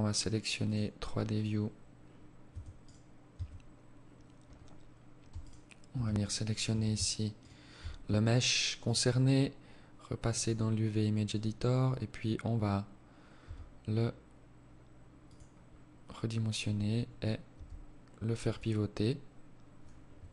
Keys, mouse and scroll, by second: 0.3 click, 1.3 Tab, 1.7 right click, 2.2 Tab, 3.4 scroll up 4, 4.3 alt+right click, 5.1 shift+right click, 6.2 alt+shift+right click.